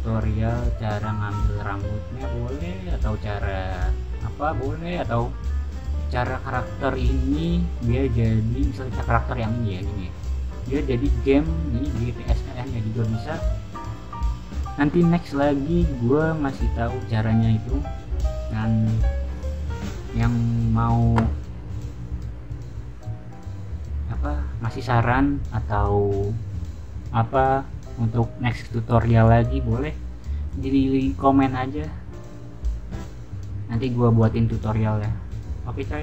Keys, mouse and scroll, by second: 1.3-2.7 scroll down 2, 4.4 scroll down 1, 5.9 scroll down 1, 8.9 scroll up 1, 11.1-11.8 scroll down 1, 13.4-15.5 scroll down 2, 15.5-17.6 scroll down 1, 18.0 scroll up 2, 18.2-19.0 scroll down 2, 29.8 scroll down 2.